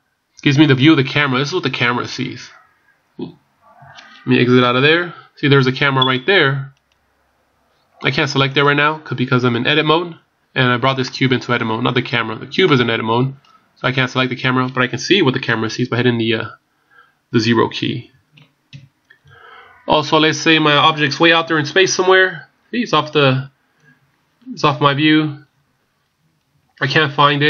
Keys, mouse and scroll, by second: 1.9 scroll up 3, 2.2-2.7 scroll down 5, 2.7 scroll up 2, 3.1 scroll down 1, 4.6 KP_1, 6.0 right click, 11.0 middle click, 12.7 middle click, 16.0 KP_0, 18.7 KP_1, 19.8 scroll down 2, 21.6-23.0 scroll down 35, 23.0-23.3 scroll down 1, 24.8-25.6 ctrl+scroll down 10, 26.2 ctrl+scroll down 10.